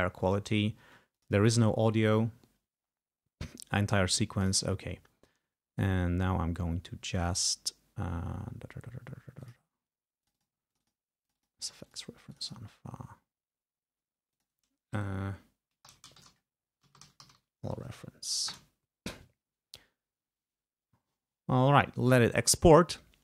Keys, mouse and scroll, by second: 1.2 click, 4.5 click, 9.5 click, 10.3 click, 10.8 click, 11.4 click, 11.8 click, 12.4 click, 14.4 click, 15.6-17.9 typing, 18.7 Return.